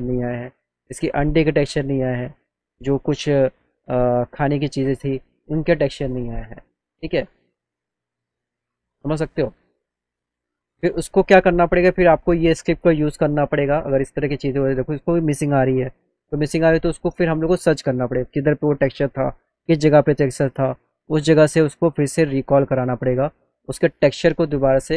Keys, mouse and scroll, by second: 6.3-8.0 alt+middle drag, 12.8 right click, 21.4 click, 22.7 click, 23.4 click, 23.7 click, 24.4 click.